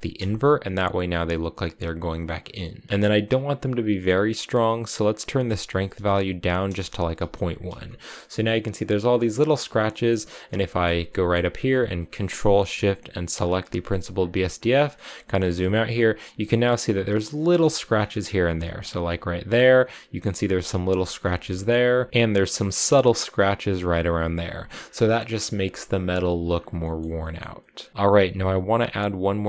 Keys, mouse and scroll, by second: 0.0 click, 4.9-7.7 drag, 7.7-8.9 shift+middle drag, 8.9-10.3 scroll down 13, 9.7 middle click, 10.3-13.2 middle drag, 13.2 ctrl+shift+click, 14.7 scroll down 3, 15.1 shift+middle click, 15.4 scroll up 2, 17.4 shift+middle click, 17.7-18.4 scroll up 7, 18.4-20.7 shift+middle drag, 20.7-21.3 scroll down 9, 21.3 shift+middle click, 21.5-22.4 scroll up 3, 24.3 scroll down 4, 24.5 scroll up 1, 24.7 scroll down 1, 24.9-26.3 shift+middle drag, 26.3-26.6 scroll down 4, 26.6 middle click, 27.4 scroll up 1, 27.4 middle click, 27.9 click.